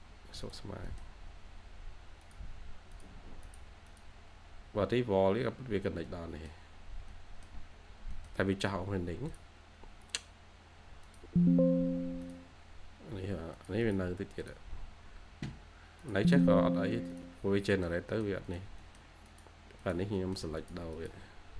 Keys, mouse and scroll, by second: 0.8 middle click, 1.4-2.4 scroll up 1, 3.8 double click, 4.3-4.7 scroll up 1, 5.6-6.0 scroll down 1, 6.0 middle click, 6.8 scroll down 1, 7.0 middle click, 7.7-8.0 scroll down 1, 8.0 middle click, 12.7-13.7 scroll up 1, 13.7 double click, 17.3-18.0 scroll down 2, 17.7 middle click, 18.0 middle click, 19.0-20.0 scroll up 1, 20.1 middle click, 21.2-21.5 scroll up 1.